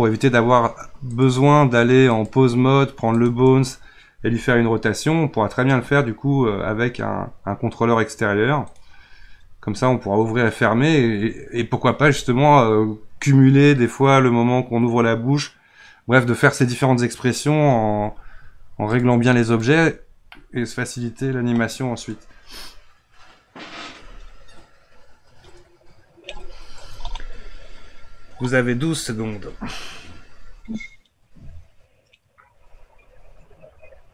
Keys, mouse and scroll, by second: 1.1-3.3 drag, 4.3 r, 18.9-20.3 drag, 20.3-21.9 middle drag, 21.9 click.